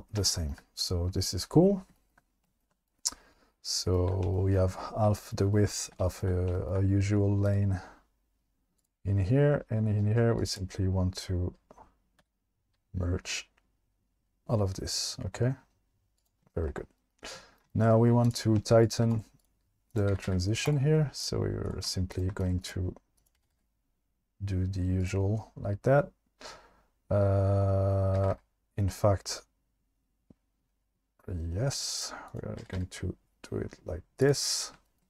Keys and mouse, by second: 2.6 shift+middle click, 3.0 alt+middle click, 7.5 click, 10.1 click, 10.4 click, 12.2 g, 16.2 click, 18.9 shift+click, 19.2 right click, 20.1 g, 20.3 g, 21.2 click, 22.4 right click, 23.2 click, 23.4 g, 23.5 g, 25.0 click, 28.2 g, 28.3 g, 32.0 click, 32.3 click, 32.6 g, 32.8 g.